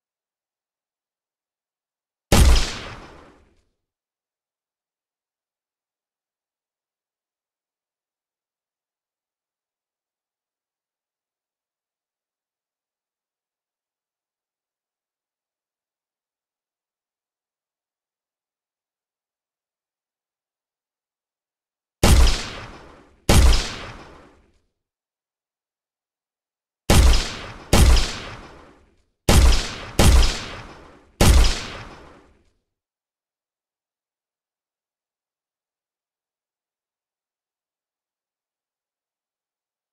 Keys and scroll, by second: 3.1 q, 4.0 2, 4.7 w, 6.9-8.1 typing, 13.5 w, 20.4 d, 24.3 a, 33.9 w, 39.2 Escape.